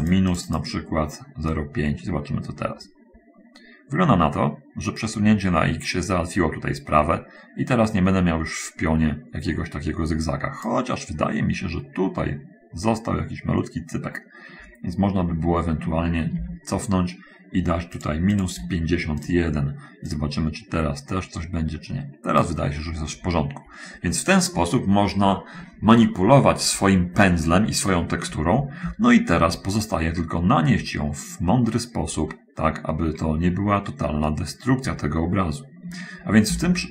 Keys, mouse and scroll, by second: 1.8-11.2 drag, 11.6 middle click, 13.8-14.2 scroll down 1, 14.8-15.2 scroll up 1, 15.4 scroll up 1, 16.7 ctrl+z, 18.3 click, 18.7 click, 18.9 1, 19.5 click, 20.4-22.8 drag, 23.1 middle click, 23.6 middle click, 34.0-36.5 middle drag, 36.8 ctrl+z.